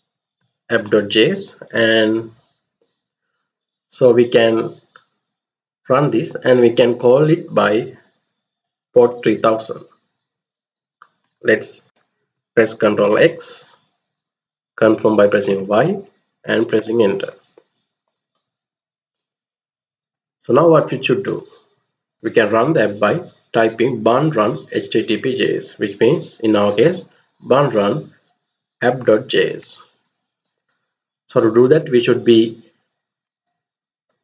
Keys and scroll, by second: 0.0-0.1 typing, 12.6 ctrl+x, 15.2 y, 16.4 Return, 20.1 alt+Tab, 29.2 alt+Tab.